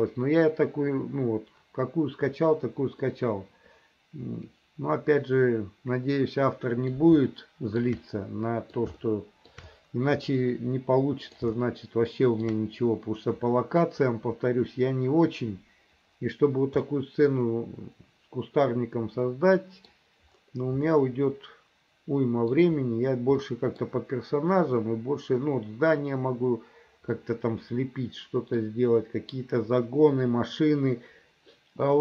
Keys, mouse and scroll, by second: 3.1-7.0 middle drag, 7.4 shift+middle click, 8.1 middle click, 9.0 shift+middle click, 10.4-11.5 middle drag, 11.6 shift+middle click, 16.9-20.0 middle drag, 20.9-22.6 middle drag, 23.4 middle click, 27.3-28.7 middle drag.